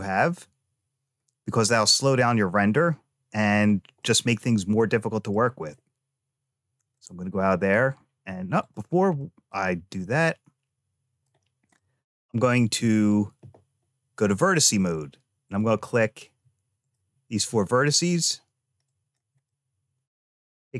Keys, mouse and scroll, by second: 3.5-3.9 scroll down 1, 3.9-5.2 middle drag, 6.6-8.3 drag, 8.5 click, 9.0-11.1 middle drag, 11.6 middle click, 12.3-12.8 scroll up 1, 14.1 click, 15.3 click, 16.7 shift+click, 17.7 shift+click, 18.7 shift+click, 19.3 middle click.